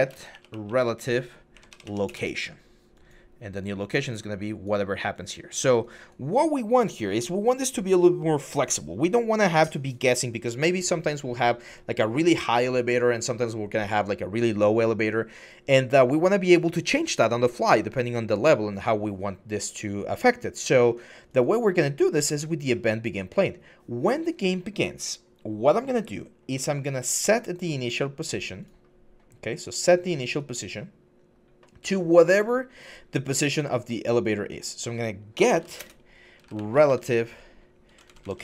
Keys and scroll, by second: 0.0-0.8 typing, 1.3 Up, 1.5 Up, 1.9 Return, 34.9-36.7 typing, 37.7 Down, 37.8 Down, 38.1 Down.